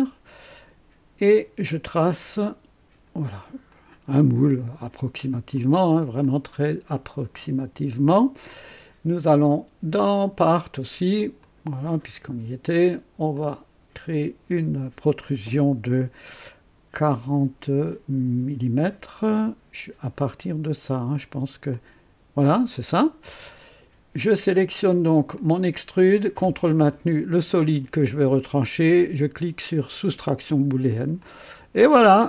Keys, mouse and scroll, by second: 1.2 click, 2.1 click, 3.7 click, 5.5 click, 6.2 click, 10.1 click, 11.3 click, 13.3 click, 17.2 KP_4, 18.8 KP_0, 21.6 click, 22.7 click, 24.2 click, 25.3 click, 27.4 ctrl+click, 30.4 click, 31.1-32.2 drag.